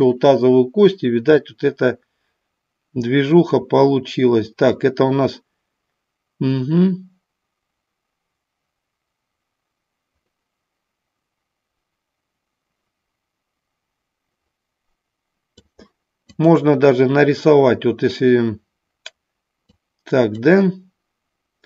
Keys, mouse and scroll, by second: 1.4-15.7 drag, 16.2 click, 19.7 click.